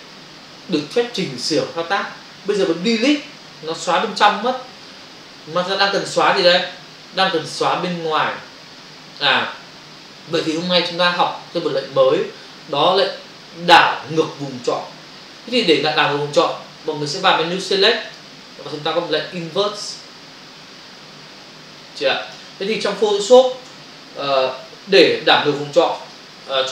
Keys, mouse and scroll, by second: 3.4 Delete, 6.2 ctrl+alt+z, 18.1 click, 20.6 Print, 22.2 click, 23.7 Return, 25.0 f.